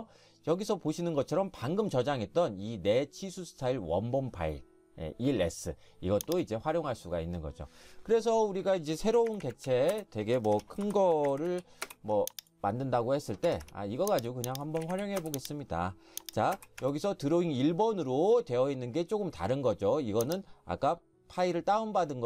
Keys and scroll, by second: 8.9-10.0 typing, 10.4 Escape, 10.6 Escape, 11.1-12.0 typing, 13.5 Escape, 13.6 Escape, 14.8-15.2 typing, 16.8 Escape.